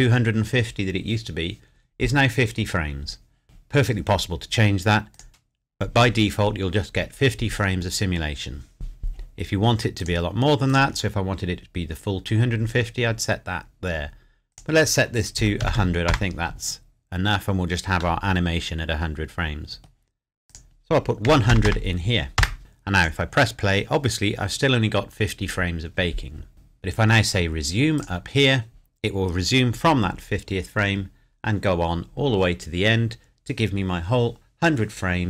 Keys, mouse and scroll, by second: 3.4 click, 10.0 click, 14.5 click, 15.3 KP_1, 16.1 KP_Enter, 17.2-17.6 scroll up 1, 18.2 middle click, 20.5 click, 21.3 KP_1, 21.5 KP_0, 22.4 KP_Enter, 23.0 click, 26.5 click.